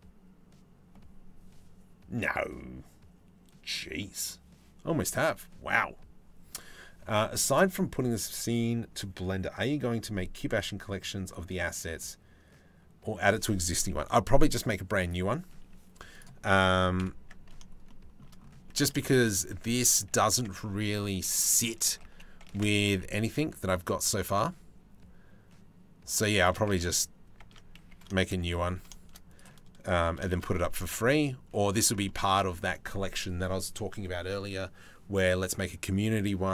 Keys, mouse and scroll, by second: 15.8 click, 16.6 KP_7, 18.4 Tab, 19.9 Tab, 21.5 a, 22.2 Tab, 22.6 g, 27.0 Tab, 27.4 a, 28.3 d, 29.7 s, 31.7 middle click.